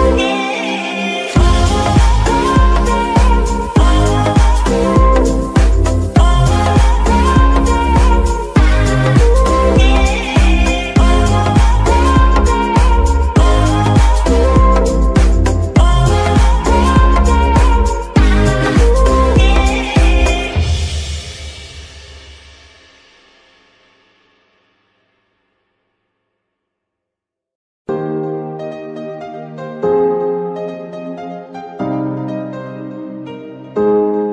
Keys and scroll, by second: 10.5 KP_1, 11.0 Tab, 11.6 s, 12.5 Tab, 12.9 s, 14.4 Tab, 14.9 s, 15.8 Tab, 16.5 shift+s, 18.1 KP_7, 21.4 s, 21.5 x, 27.8 g, 28.6 Escape.